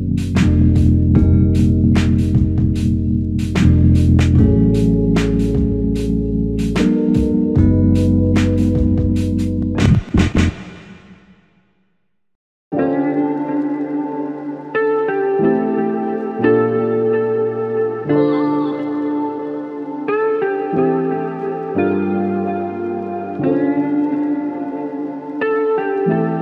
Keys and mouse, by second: 5.4 shift+click, 9.2 shift+click, 15.7 space, 19.4 double click.